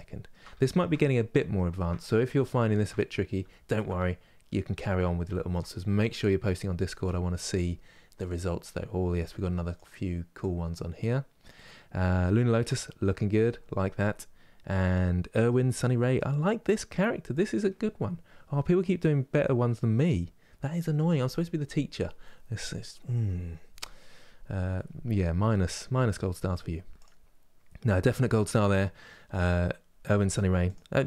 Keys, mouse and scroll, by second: 1.8-2.2 scroll down 1, 2.2 shift+middle click, 2.8 scroll down 1, 3.2-31.0 shift+middle drag.